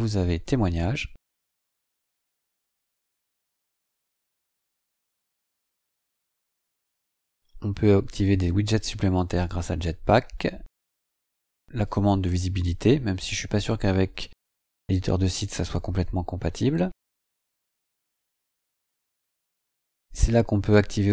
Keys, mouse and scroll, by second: 1.8-2.7 scroll down 3, 4.3-4.6 scroll down 2, 8.1 click, 11.7 click, 16.8-18.5 scroll up 8, 19.2 click.